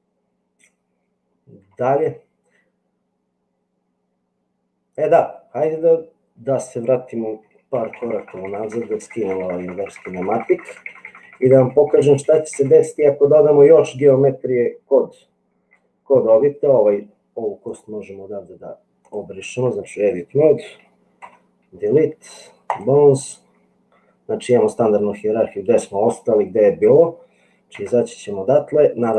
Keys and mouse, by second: 7.6-8.6 ctrl+z, 8.9 ctrl+z, 9.1 ctrl+z, 9.3-10.3 ctrl+z, 11.1 ctrl+z, 11.5 ctrl+z, 11.7 ctrl+z, 11.9 ctrl+z, 12.3 ctrl+z, 16.2 click, 17.7-19.6 drag, 21.2 Delete, 27.9 Tab, 29.0 click.